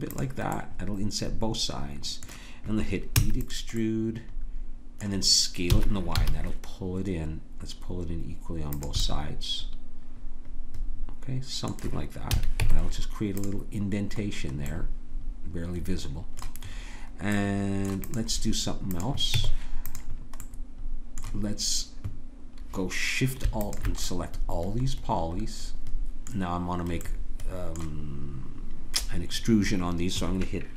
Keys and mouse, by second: 0.6-3.1 drag, 3.2 e, 3.8 click, 5.7 s, 9.1-11.0 middle drag, 12.3 a, 12.6 Tab, 17.5 right click, 18.1-19.1 drag, 19.1 right click, 19.3 Tab, 19.3-20.8 drag, 23.6-25.2 drag.